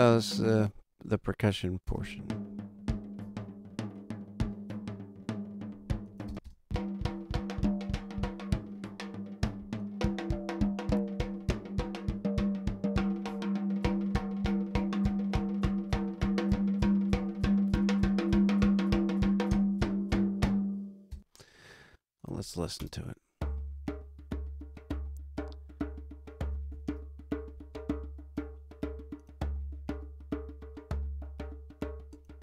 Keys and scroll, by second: 0.5 space, 1.8 space, 6.2 space, 21.0 space, 22.7 space, 26.6 super+=.